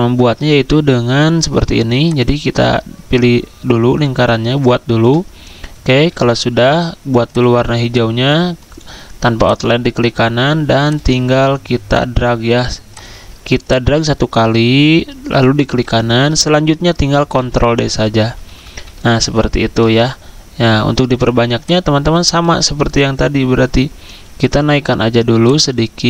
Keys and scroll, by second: 17.4 ctrl+d, 17.7 ctrl+d, 17.9 ctrl+d, 18.2 ctrl+d, 18.4 ctrl+d.